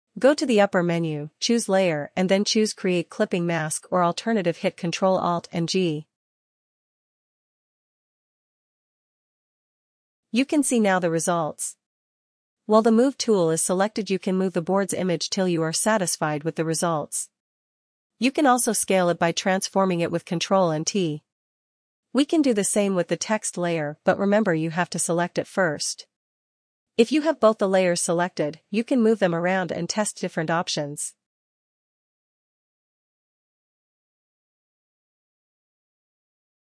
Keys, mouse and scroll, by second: 1.1 click, 2.9 click, 11.6 click, 14.6 click, 19.3 click, 20.6 click, 22.9 click, 25.8 click, 28.6 ctrl+t, 28.6 click, 32.9 click, 34.3 click.